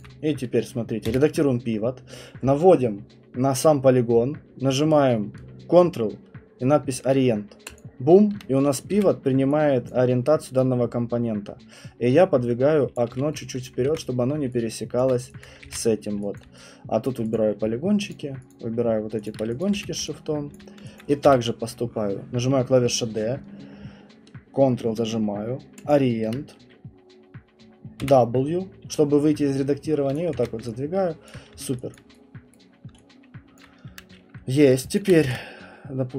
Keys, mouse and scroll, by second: 0.0 alt+middle click, 0.0 alt+click, 1.1 d, 7.8 ctrl+click, 8.9 w, 9.9 alt+click, 12.9 click, 13.1 q, 13.6 right click, 13.9 ctrl+1, 14.2 middle click, 15.0 alt+click, 15.4 click, 16.1 ctrl+1, 16.4 alt+click, 17.1 right click, 17.3 click, 18.1 shift+click, 18.5 shift+click, 19.3 shift+click, 19.6 alt+click, 19.7 w, 21.0 click, 21.3 d, 25.9 ctrl+click, 28.0 ctrl+click, 28.0 w, 30.1 click, 30.6 ctrl+1, 31.3 click, 31.5 q, 32.0 alt+click, 32.5 right click, 32.6-33.3 scroll, 33.6 alt+click, 34.2-34.7 scroll, 34.7 alt+click, 35.0 shift+click, 35.8 ctrl+1, 35.8 middle click.